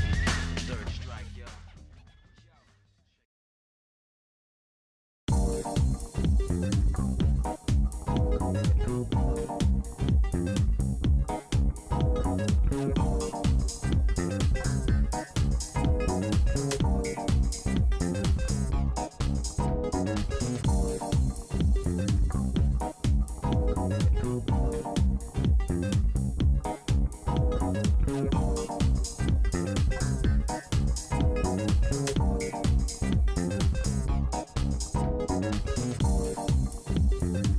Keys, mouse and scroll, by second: 3.9 middle click, 4.4 scroll down 1, 4.7 z, 6.1-6.4 scroll down 2, 6.7 shift+middle click, 7.5-8.0 scroll down 2, 8.2 middle click, 8.8 shift+middle click, 9.3 middle click, 9.8 middle click, 10.3 shift+middle click, 11.4-12.2 scroll up 4, 12.3 scroll down 1, 12.5 scroll down 2, 13.0 click, 13.8 shift+click, 15.0 ctrl+z, 15.4 shift+click, 16.5 Delete, 17.0 middle click, 17.6 middle click, 18.5 click, 19.1 middle click, 20.4 middle click, 20.9-21.7 scroll up 4, 22.3-23.6 shift+middle drag, 23.8 scroll up 1, 24.3 click, 24.6 Tab, 25.3 scroll up 1, 25.9 scroll up 2, 26.2 click, 26.7 shift+click, 28.1 g, 31.4 shift+middle click, 32.1 Tab, 32.4-33.0 scroll down 4, 32.9 scroll up 1, 33.2 scroll down 1, 33.5 middle click, 34.1 scroll up 1, 34.4 scroll down 1, 34.7 click, 35.0 Tab, 35.3-35.7 scroll up 2, 35.7 scroll down 1, 36.8 click, 37.4 shift+click.